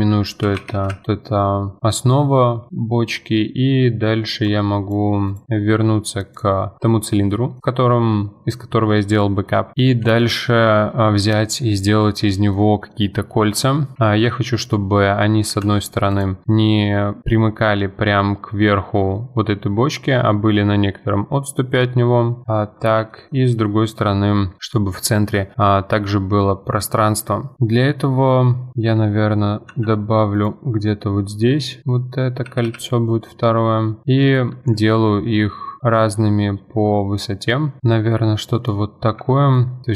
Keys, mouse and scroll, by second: 4.5 click, 5.9-6.3 middle drag, 6.3 click, 7.3-9.4 middle drag, 11.4-13.5 middle drag, 13.5 Tab, 13.9 scroll up 2, 14.0-15.6 shift+middle drag, 15.6 ctrl+r, 22.8-23.1 scroll down 1, 23.1-26.1 shift+middle drag, 29.7 ctrl+r, 31.8-32.5 scroll up 1, 32.5 g, 35.2 ctrl+r, 37.8-38.9 middle drag, 38.9 3, 39.5 alt+click.